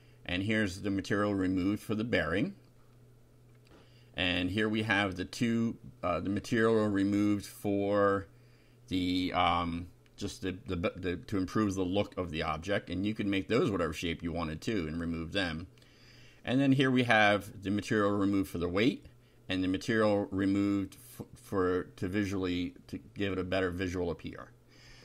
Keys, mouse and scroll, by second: 0.4 Up, 0.7 Left, 1.9 shift+3, 2.3 shift+F5, 4.3 BackSpace, 4.8 Down, 6.2 shift+3, 6.7 F5, 8.2 Down, 8.6 Left, 9.6 shift+3, 10.4 F5, 12.2 BackSpace, 12.6 Delete, 13.9 t, 14.0 Up, 14.6 Delete, 15.2 Down, 16.7 Home, 17.7 shift+3, 18.1 shift+F5, 19.1 Down, 19.5 Left, 20.0 shift+Left, 20.4 shift+3, 20.7 shift+F5, 21.6 Up, 22.0 BackSpace.